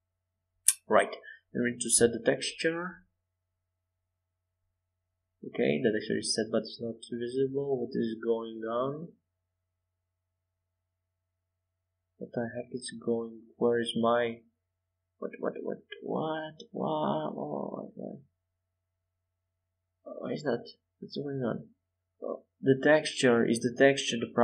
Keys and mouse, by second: 11.8-13.0 middle drag, 13.6-15.5 middle drag, 15.5-24.4 drag.